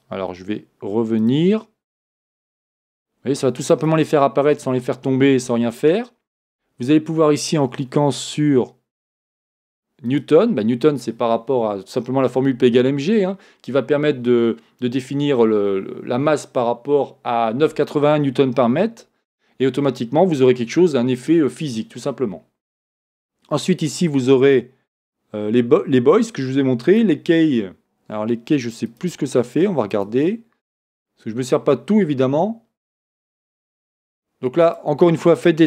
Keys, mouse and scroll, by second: 1.2-5.3 drag, 9.0-29.0 drag, 29.9-35.6 drag.